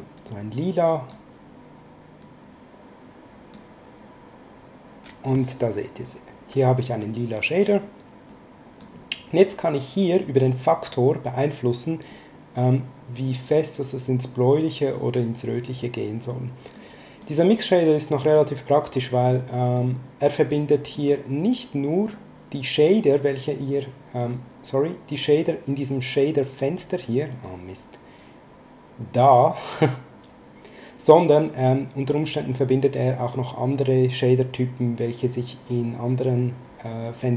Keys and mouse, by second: 0.1 click, 2.2 click, 8.3 click, 12.1 click, 17.2 click, 19.2 click, 20.9 click, 24.2 click, 27.3 click.